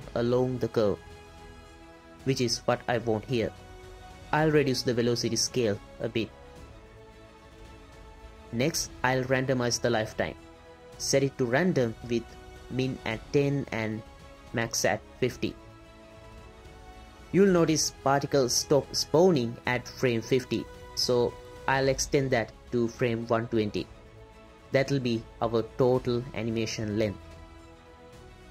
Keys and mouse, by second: 0.0-0.5 drag, 1.1 space, 1.5-1.8 drag, 4.5 click, 5.4 click, 5.6 space, 6.8-7.5 drag, 8.2 click, 8.8 click, 11.0 click, 12.3-13.7 drag, 20.2 click, 22.7-23.9 drag, 25.2-26.3 drag, 27.5-28.5 drag, 27.5-28.5 right drag.